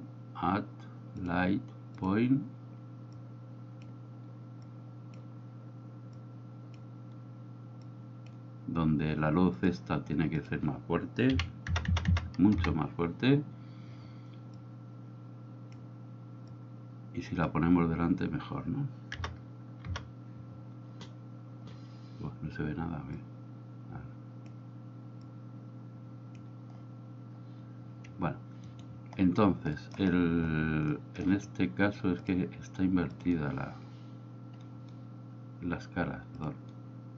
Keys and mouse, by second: 3.3-4.0 drag, 4.9 click, 6.2-6.8 drag, 7.9-8.3 drag, 9.6 click, 10.4-13.1 drag, 11.9 KP_0, 14.6-15.9 drag, 16.6-17.6 drag, 19.2 KP_0, 23.3-24.7 drag, 25.4-26.4 drag, 28.8 right click, 29.8 middle drag, 31.0-31.3 middle drag, 32.3-33.4 drag, 36.5-37.1 drag.